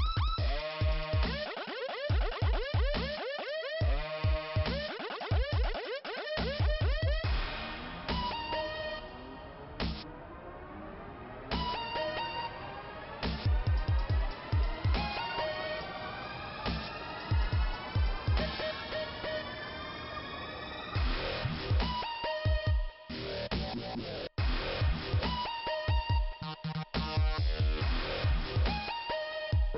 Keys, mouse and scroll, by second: 1.8 click, 1.8 click, 2.4 middle click, 2.9 scroll up 2, 3.8 click, 5.6 click, 8.4 click, 8.9 Delete, 10.9 click, 12.9 click, 15.1 click, 15.2 click, 15.9 click, 17.6 click, 17.8 click, 18.1 click, 18.1 double click, 19.5 click, 21.5 click, 23.0-23.6 scroll down 1, 23.6 click, 25.7 click, 27.1 click.